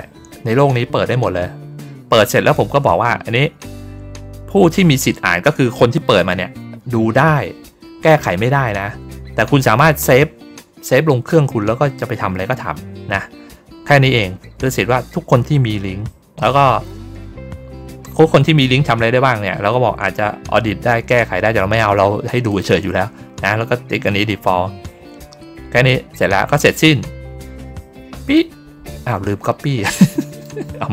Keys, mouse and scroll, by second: 18.3 click, 22.4 click, 28.1 click, 30.2 right click.